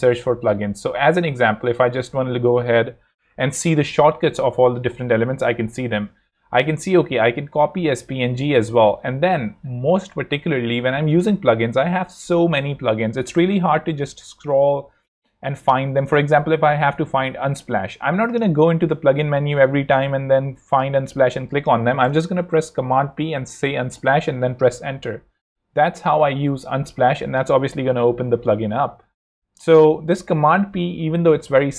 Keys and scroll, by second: 0.7 BackSpace, 1.2 a, 4.0 Down, 5.5 Up, 9.0 Escape, 17.6 Escape, 21.3 Escape, 22.0 super+Escape, 22.4 super+p, 22.9-24.0 typing.